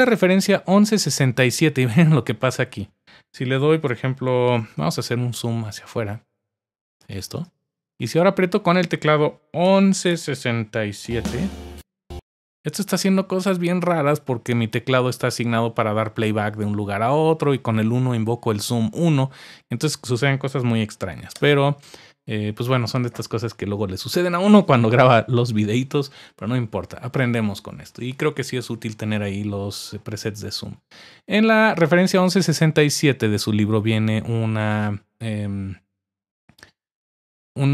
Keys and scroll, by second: 9.6-11.7 typing.